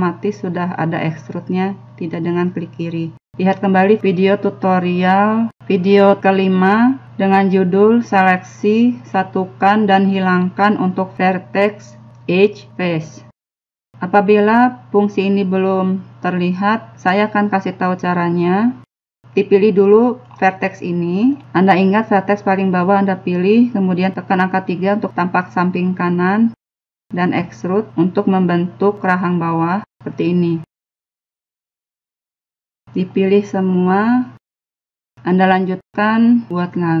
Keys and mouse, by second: 17.1 x, 18.9 KP_3, 20.4 middle click, 21.4 right click, 24.4 KP_3, 28.2 e, 28.8 e, 29.2 e, 29.8 middle click, 33.3 middle click, 34.0 b, 34.4 click, 35.3 KP_1, 36.4-37.0 typing.